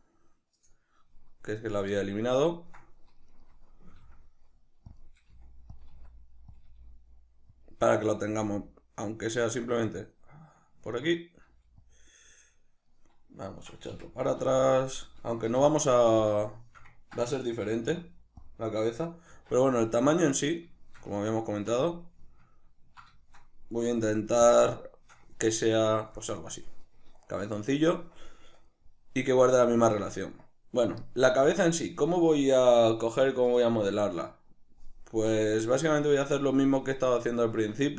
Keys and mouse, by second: 0.6 click, 2.1-3.4 ctrl+middle drag, 3.4 right click, 4.1 s, 5.0 click, 5.4 g, 5.8 click, 6.0 s, 6.6 click, 6.7 g, 7.7 click, 8.3 g, 9.6 click, 10.0 ctrl+middle click, 11.5 g, 12.0 click, 12.9 middle click, 13.9 g, 16.3 click, 16.5-18.5 shift+middle drag, 17.7 g, 18.5 click, 19.3 alt+q, 20.1-37.9 middle drag, 24.0 alt+q.